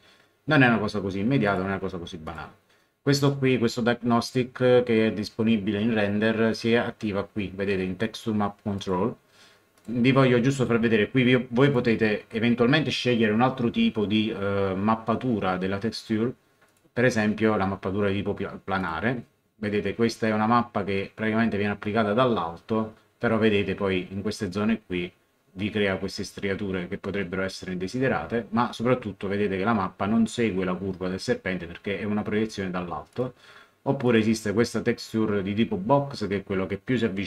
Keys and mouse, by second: 1.4 click, 8.7 click, 11.6 click, 16.6 click, 18.8 click, 33.1 click.